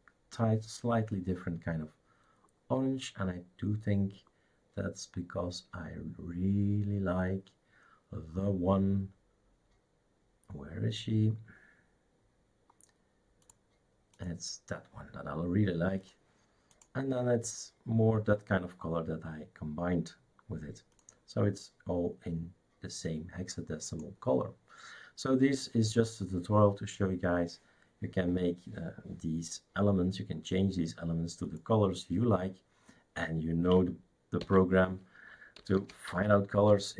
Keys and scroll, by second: 34.4 shift+super+d, 35.4-36.9 typing.